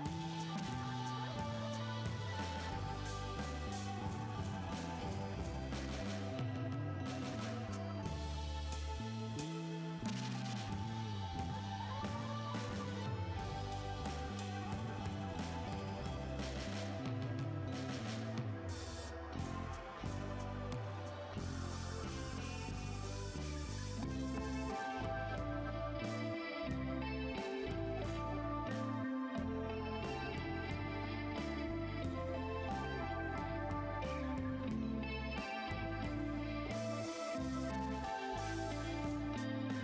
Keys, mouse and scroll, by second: 2.9 2, 3.0 Return, 6.1 typing, 6.3 Return, 18.4 typing, 18.7 Return, 22.2-22.8 typing, 24.0 5, 24.2 Return, 34.7 typing, 35.5 Return.